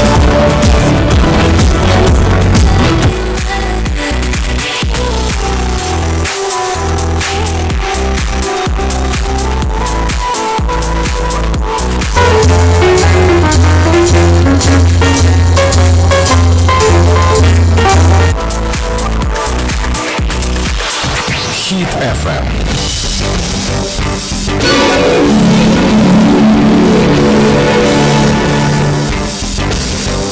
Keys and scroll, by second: 3.1 Page_Down, 19.0 Page_Down.